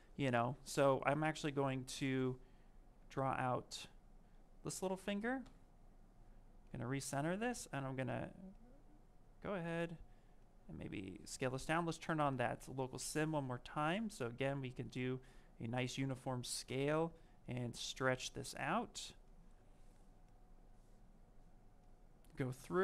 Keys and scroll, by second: 5.3 w.